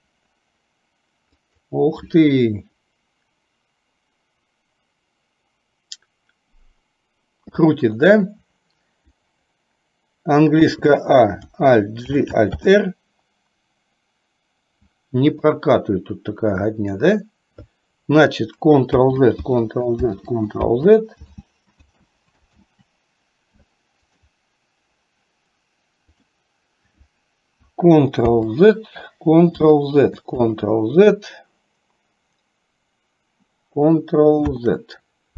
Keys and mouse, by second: 10.7 a, 12.1 alt+g, 12.7 alt+r, 15.3 click, 18.9 ctrl+z, 19.6 ctrl+z, 20.2 ctrl+z, 20.8 ctrl+z, 21.9 z, 28.3 ctrl+z, 30.6 ctrl+z, 34.6 ctrl+z.